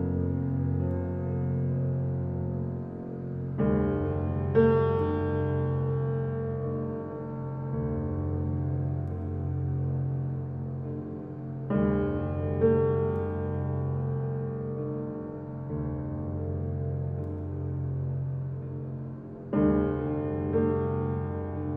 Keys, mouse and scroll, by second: 0.5 click, 0.9 shift+click, 1.7 shift+click, 2.1 shift+click, 2.4 shift+click, 3.0 shift+click, 3.3 shift+click, 3.6 shift+click, 3.9 shift+click, 4.1 shift+click, 4.4 shift+click, 4.8 shift+click, 5.1 shift+click, 5.4 shift+click, 5.7 shift+click, 6.4-7.8 middle drag, 7.8 click, 8.3 alt+click, 8.8 alt+click, 9.4 alt+click, 10.2 alt+shift+click, 10.7-12.3 middle drag, 12.3 alt+shift+click, 13.0 ctrl+z, 13.8 alt+shift+click, 14.4 alt+shift+click, 14.8 scroll up 4, 15.0 shift+middle click, 15.7 shift+click, 15.9 shift+click, 16.4 shift+click, 16.8 e, 20.0 click, 20.9 click, 21.4 click.